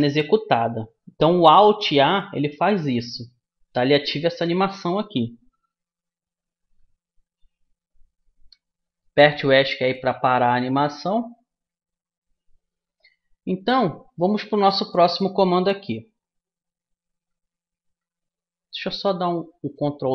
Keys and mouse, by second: 8.5 Escape, 12.9-15.9 middle drag, 18.7 ctrl+z.